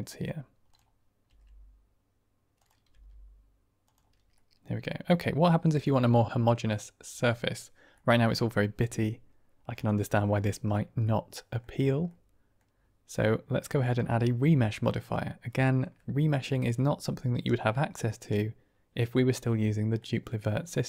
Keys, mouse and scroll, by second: 0.0 middle drag, 0.6-1.4 drag, 1.4 r, 3.2 g, 4.3-5.0 middle drag, 5.4-5.8 middle drag, 6.0 shift+middle drag, 7.8 middle click, 9.6 click, 10.9-11.5 middle drag, 12.0-12.6 middle drag, 13.8-15.9 drag, 16.6-18.2 middle drag, 19.9-20.8 middle drag.